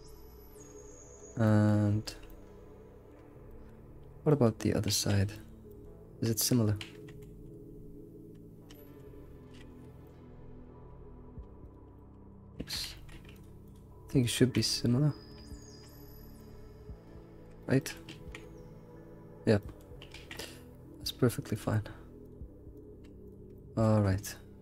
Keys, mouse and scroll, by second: 0.4 middle click, 1.2 shift+click, 1.4 middle click, 2.0 ctrl+shift+click, 2.3-3.5 middle drag, 4.3 alt+middle click, 4.8 alt+middle click, 5.4 alt+x, 5.7 alt+middle click, 6.8 alt+x, 7.7-8.0 scroll up 2, 8.8 alt+x, 9.7 alt+x, 10.0-11.1 middle drag, 11.1-11.4 scroll down 1, 11.6 shift+click, 12.0 middle click, 12.6 ctrl+z, 12.8 alt+x, 13.3 shift+click, 13.7 shift+click, 14.2 shift+click, 14.6-15.6 middle drag, 15.6 shift+click, 15.9 scroll, 16.0-16.4 scroll up 2, 16.4-17.6 middle drag, 18.1 alt+s, 19.1 alt+x, 19.8 alt+middle click, 20.1 alt+x, 20.3-21.5 middle drag, 21.5 shift+click, 22.2 shift+click, 22.7 shift+click, 23.2 ctrl+click, 23.5 middle click, 24.0 scroll down 2, 24.2-24.6 middle drag.